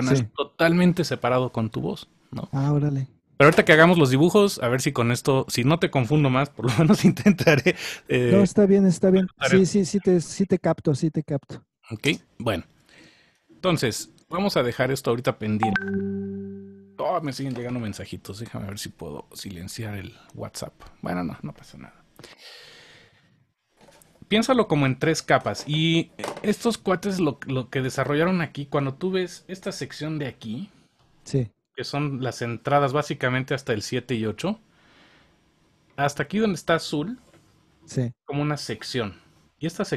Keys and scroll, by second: 13.7 super+s.